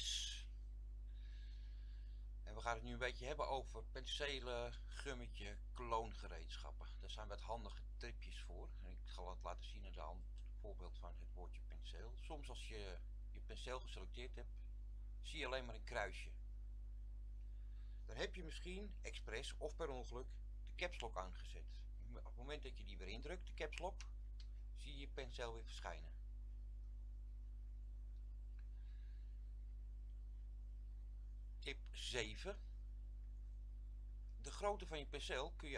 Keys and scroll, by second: 24.1 Caps_Lock.